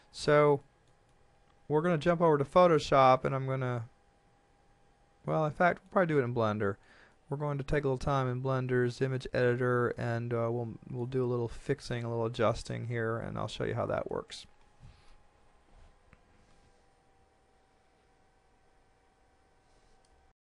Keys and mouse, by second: 0.6 shift+middle click, 2.8 shift+middle click, 6.1 middle click, 12.4 shift+middle click, 14.1 shift+middle click.